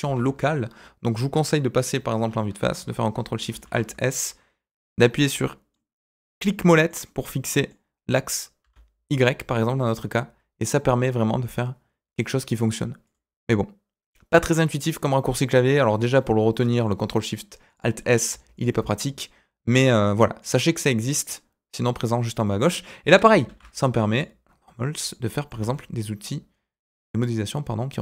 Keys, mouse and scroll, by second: 0.0 ctrl+z, 1.4 KP_1, 2.2 scroll up 1, 3.5 ctrl+alt+shift+s, 13.0 typing, 16.2 middle click, 17.6 click, 18.0 scroll down 2, 18.5 alt+click, 18.9 middle click, 20.4 click, 20.7 middle click, 22.4 middle click, 23.4 alt+e, 25.2 middle click, 25.5 Tab, 25.7-28.0 middle drag.